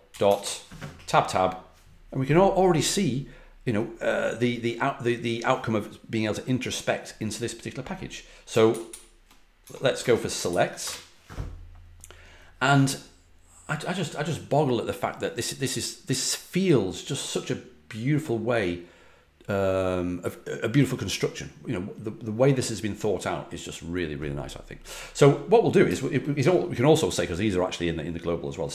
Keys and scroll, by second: 0.0-0.8 typing, 8.4-9.3 typing, 9.9 Tab, 10.4 ctrl+l, 10.8 Return, 28.5-28.7 typing.